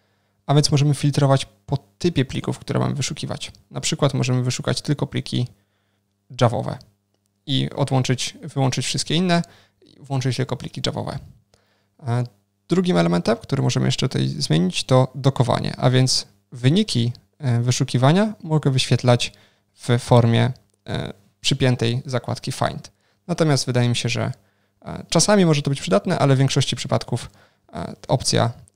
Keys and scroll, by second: 27.8 ctrl+shift+super+o.